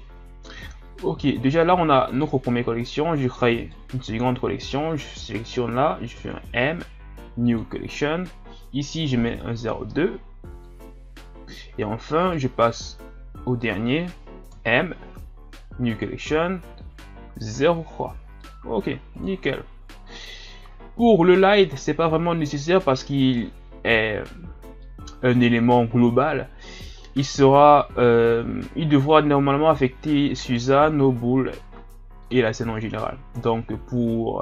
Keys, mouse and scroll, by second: 2.1 click, 3.6 right click, 6.1 m, 12.2 right click, 14.5 m, 23.2 right click, 24.2 scroll down 2, 24.9-26.4 middle drag, 26.4-27.1 scroll up 2, 27.1 ctrl+scroll down 4, 28.0 shift+scroll up 2, 30.6-32.2 right drag, 32.2-34.4 middle drag.